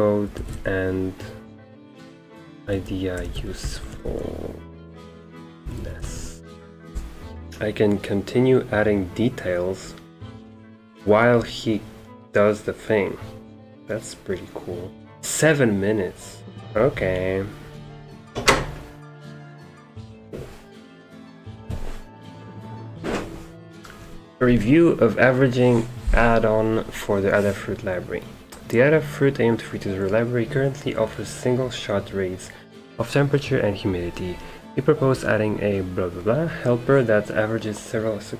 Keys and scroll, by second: 0.0-0.7 typing, 1.9-6.6 typing.